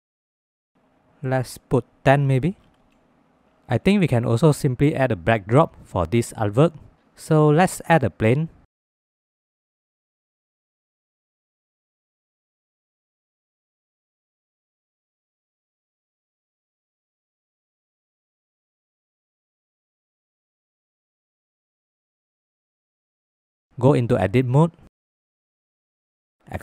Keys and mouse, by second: 1.2-2.9 drag, 5.3 click, 6.5-7.0 middle drag, 7.4 shift+a, 8.9 shift+middle click, 9.2 shift+middle click, 9.7-11.7 drag, 12.0 click, 12.4 click, 12.6 click, 13.5-14.5 drag, 15.8 click, 16.6 click, 18.9-21.4 drag, 22.3 shift+middle drag, 22.7-23.7 middle drag, 24.2 Tab, 24.7 1, 25.3 middle click.